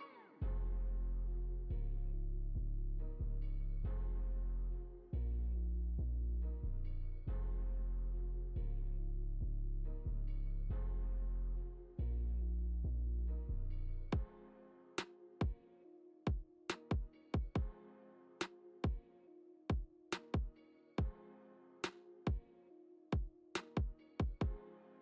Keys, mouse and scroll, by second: 0.8 click, 4.5 g, 8.2 shift+middle click, 10.4 ctrl+z, 11.1 ctrl+z, 11.5 click, 14.2 g, 17.7 i, 18.8 i, 20.1 middle click, 22.8 click.